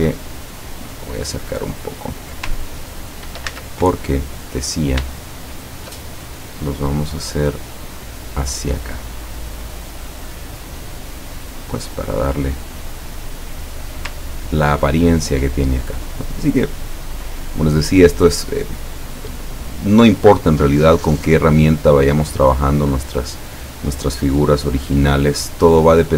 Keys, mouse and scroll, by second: 1.1-1.5 ctrl+scroll up 2, 2.8 ctrl+scroll down 2, 3.6 ctrl+z, 4.2 ctrl+click, 5.4-6.1 shift+drag, 7.6-14.0 drag, 14.4-14.9 ctrl+scroll down 2, 18.0 click, 21.7 click.